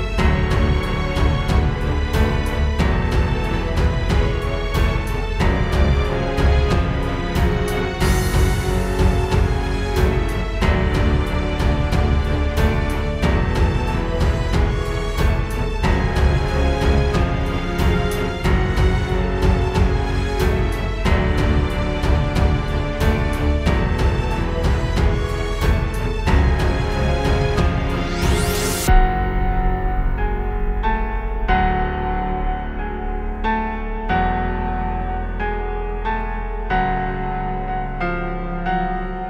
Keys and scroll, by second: 10.1-12.7 typing, 15.9 space, 16.6 space, 17.7 space, 18.4 space, 18.8 space, 23.3 space, 24.0 space, 24.6 super+space, 26.4 space, 27.2 super+space, 31.6 space, 32.1 space, 32.6 space.